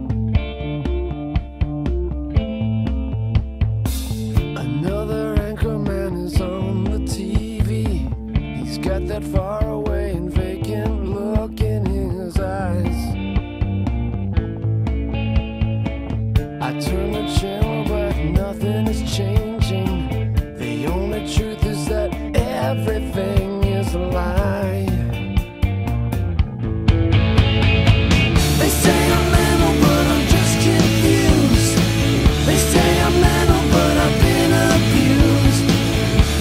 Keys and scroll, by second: 0.0-1.5 typing, 3.1-6.1 typing, 8.2-9.7 typing, 12.3-13.5 typing, 16.8-18.2 typing.